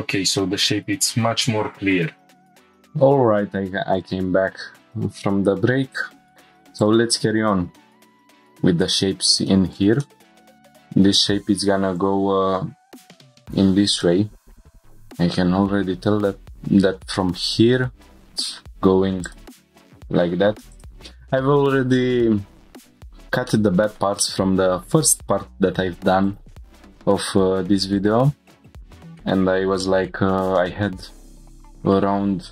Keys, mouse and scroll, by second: 0.0 scroll down 1, 0.4-0.8 middle drag, 2.5 F1, 3.9 click, 5.8 scroll up 1, 6.3 shift+middle click, 6.8 click, 7.4 scroll down 2, 7.8 shift+middle click, 8.2-8.6 scroll up 4, 8.8 Tab, 9.5-9.8 shift+middle drag, 10.0 middle click, 14.7 click, 14.7 scroll down 1, 15.0 scroll up 2, 16.0 scroll down 2, 16.5 scroll up 1, 23.5 middle click, 24.2 shift+middle click, 25.9 1, 26.2 click, 27.2 g, 27.4 g, 28.0 click, 28.6 scroll down 1, 28.8 shift+middle click, 28.9 click, 28.9 middle click, 29.4 scroll up 2, 29.8 middle click, 30.3 shift+middle click, 31.4 scroll down 1, 31.6 shift+middle click.